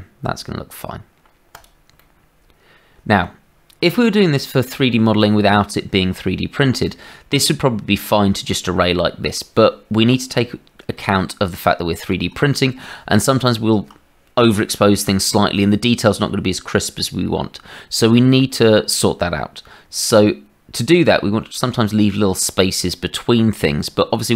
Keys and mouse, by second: 2.0-3.2 middle drag, 3.8 middle click, 4.7 shift+middle click, 7.0-8.2 middle drag, 10.9-12.1 middle drag, 12.4 shift+middle click, 19.8 Tab.